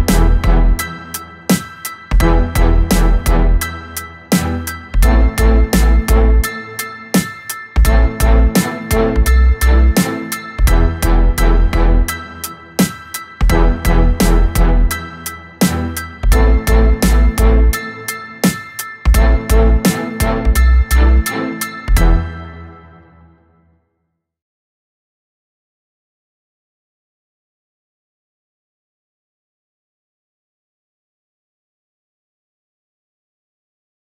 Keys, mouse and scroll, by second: 0.0 middle click, 0.9 click, 2.2 middle click, 2.8-5.2 right drag, 5.2 click, 6.4-9.4 drag, 10.6-13.8 middle drag, 14.3-15.8 drag, 15.8-18.2 middle drag, 18.2 click, 21.5-24.5 drag, 27.1-27.6 scroll down 2, 30.4-33.5 drag.